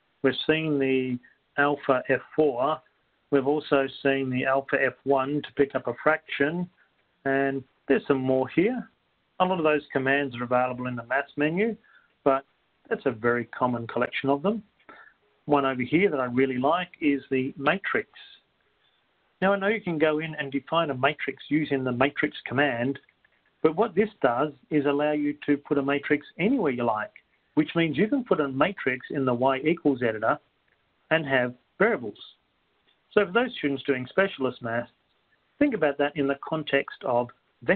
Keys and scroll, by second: 16.1 Right, 31.3 Up, 31.3 Return, 31.3 2.